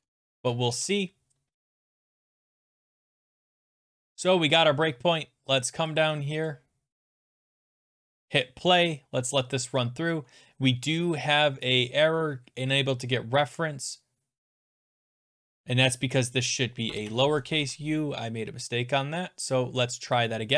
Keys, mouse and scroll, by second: 0.0 alt+Tab, 0.2 alt+Tab, 0.5 alt+Tab, 0.8 ctrl+s, 0.8 alt+Tab, 0.8 click, 1.9 click, 2.4 click, 2.9 click, 3.5 click, 5.6 click, 6.0 click, 6.5 click, 7.0 click, 7.3 click, 8.4 click, 12.8 click, 16.4 click, 16.9 BackSpace, 17.6 ctrl+s, 19.9 click.